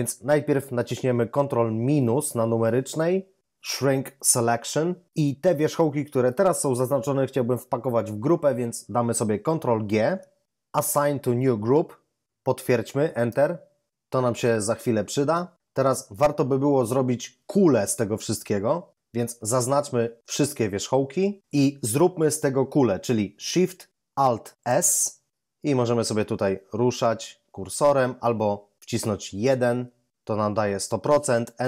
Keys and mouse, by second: 1.9 ctrl+-, 9.8 ctrl+g, 19.5 a, 20.3 a, 24.6 alt+shift+s, 29.4 1.